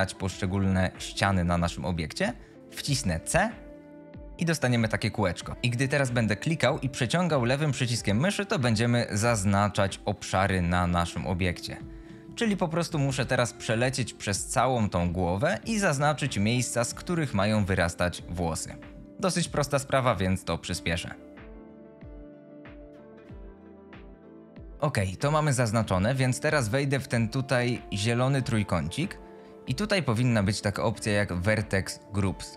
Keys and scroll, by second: 2.0 alt+a, 3.0 c, 13.5 c.